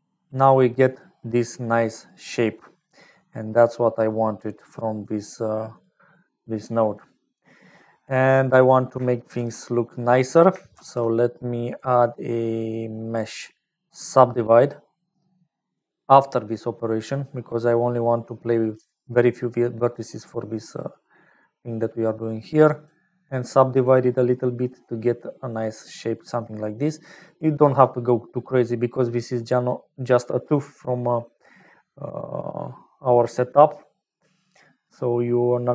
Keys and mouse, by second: 1.0 middle click, 4.0 click, 5.4 click, 10.0 click, 10.7 shift+a, 17.6-18.7 drag, 19.9 middle click, 22.7 click, 23.7 click, 24.4-25.4 middle drag, 26.1 middle click, 26.7 middle click, 28.3 middle click, 29.3 middle click.